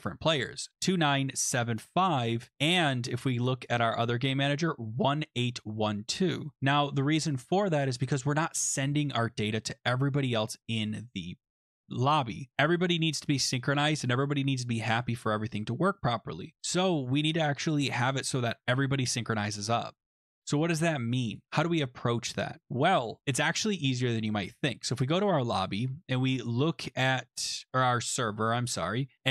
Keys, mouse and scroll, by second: 2.5 click, 3.8 click, 20.6 click, 21.4 click, 22.6 click, 24.7 click, 27.8 click.